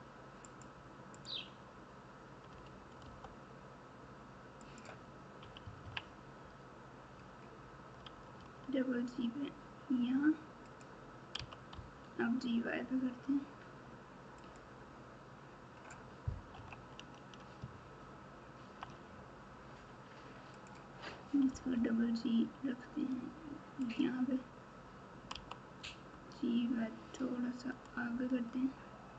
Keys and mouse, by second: 1.1 click, 2.5 g, 5.4 KP_6, 5.6 KP_6, 7.9 g, 11.3 g, 16.5 KP_1, 17.9 ctrl+KP_4, 18.5 ctrl+KP_4, 20.6 click, 21.4 g, 25.3 g.